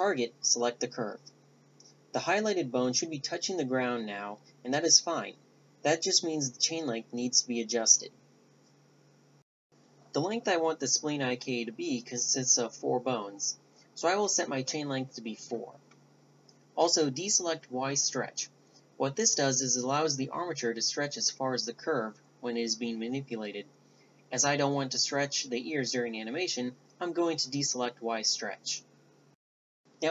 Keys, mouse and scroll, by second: 0.8-2.4 right drag, 1.6-2.7 drag, 4.9-7.0 drag, 11.6-13.7 drag, 13.8-22.6 drag, 22.6-25.4 middle drag, 25.4-29.4 right drag, 28.0 g.